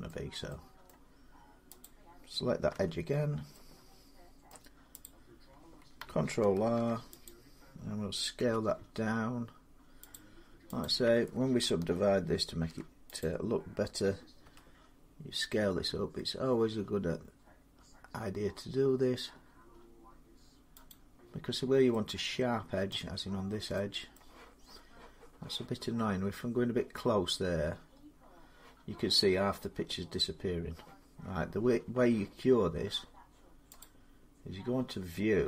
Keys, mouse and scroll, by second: 0.7 middle click, 1.6 click, 2.5 Tab, 4.3 middle click, 4.8 click, 6.4 ctrl+r, 7.0 click, 8.2 s, 9.9 click, 11.1 click, 12.3 ctrl+r, 13.0 click, 14.2 s, 20.7 click, 21.3 middle click, 21.4 middle click, 22.7 middle click, 23.0 middle click, 23.1 middle click, 23.8 scroll, 23.9-24.8 scroll, 25.8-27.0 scroll, 27.0 middle click, 27.1 middle click, 27.3 middle click, 27.5 middle click, 33.6 click.